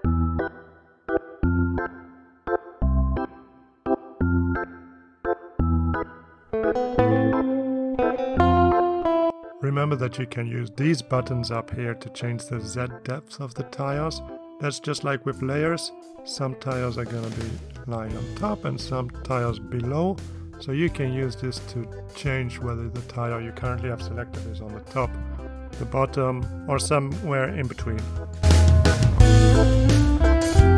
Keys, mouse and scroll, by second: 0.1 click, 0.3 click, 0.6 ctrl+d, 0.7-1.2 drag, 1.3 click, 1.6 ctrl+d, 1.6 ctrl+click, 2.1 click, 3.0 click, 3.2 ctrl+d, 3.3 click, 4.0 ctrl+d, 4.0 ctrl+click, 4.2 ctrl+d, 4.2 ctrl+shift+click, 4.6 ctrl+click, 5.0 click, 5.3 click, 5.4 ctrl+click, 5.6 ctrl+d, 5.6 ctrl+click, 6.1 click, 6.2 click, 6.3 ctrl+d, 6.4-7.2 ctrl+drag, 7.5 click, 19.8 click, 22.1 click, 23.3 click, 24.4 click, 30.2 click.